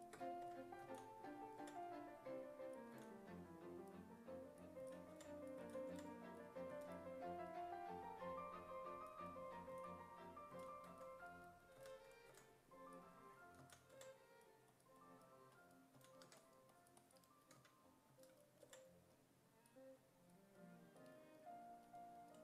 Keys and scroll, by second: 0.5 2, 0.9 s, 1.6 5, 3.0 s, 4.6-6.7 typing, 9.7-12.3 typing, 13.6 s, 14.0 5, 16.0 s, 16.3 1, 17.6 s, 18.1 s, 18.6 5.